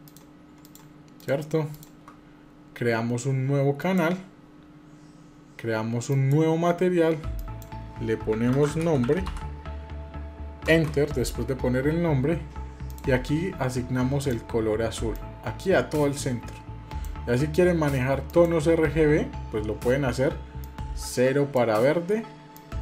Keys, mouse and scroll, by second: 1.0 shift+click, 1.6 shift+click, 3.6 click, 5.9 click, 7.1-11.8 drag, 12.6 click, 13.9 click.